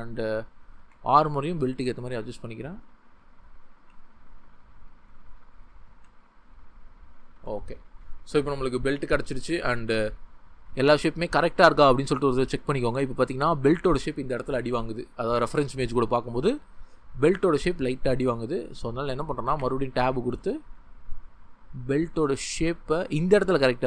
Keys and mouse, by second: 0.5 click, 0.8 g, 2.5 Tab, 2.8 click, 3.8 g, 5.1 click, 5.9 g, 6.8 click, 7.4 Tab, 12.4 ctrl+middle click, 13.1-14.9 shift+middle drag, 14.9-15.5 drag, 17.6 click, 19.6 Tab.